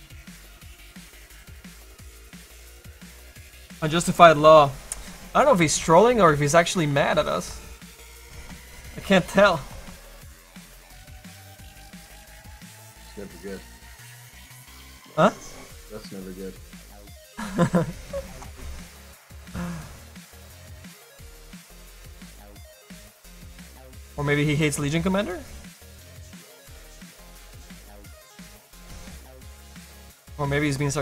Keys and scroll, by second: 14.2 ctrl+s, 24.7 ctrl+z, 29.8 ctrl+alt+z.